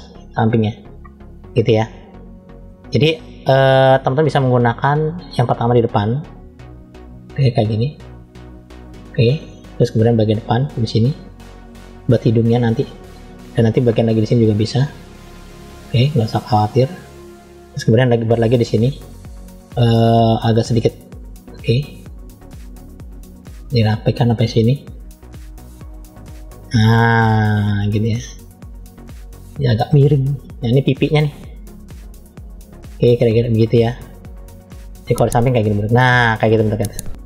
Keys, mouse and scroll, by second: 0.8 middle click, 2.0 middle click, 3.8 f, 5.7 click, 10.0 click, 12.7 middle click, 13.6 click, 17.5-17.9 scroll down 1, 17.9 middle click, 20.6 click, 34.8-37.0 middle drag.